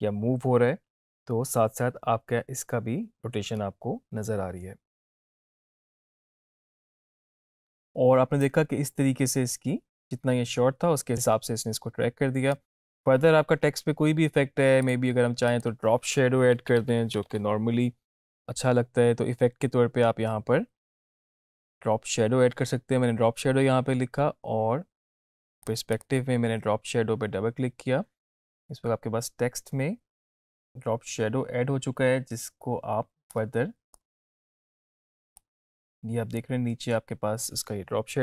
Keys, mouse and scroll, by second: 7.6 click, 8.5-12.8 drag, 16.6-17.9 typing, 18.5-20.3 scroll down 1, 21.5 scroll up 1, 25.7 click, 33.4-34.4 drag.